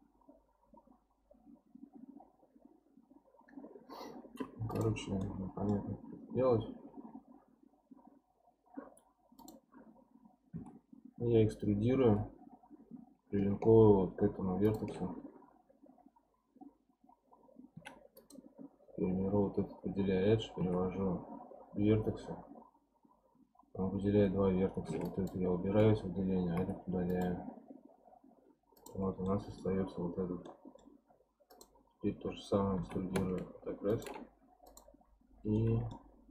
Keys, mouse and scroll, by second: 4.7 click, 5.2-8.3 middle drag, 9.4 click, 10.5 e, 18.2 click, 20.6 1, 21.8 scroll up 2, 25.0 ctrl+click, 26.6 x, 28.1-28.7 scroll down 2, 28.7 click, 29.0 scroll down 1, 29.2-31.5 middle drag, 31.5 click, 32.7 e, 34.6 click, 35.6-36.3 middle drag.